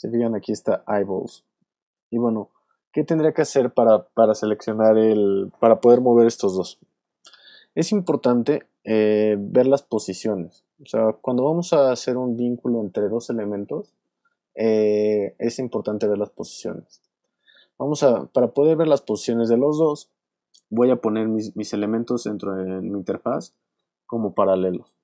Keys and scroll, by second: 9.9 p.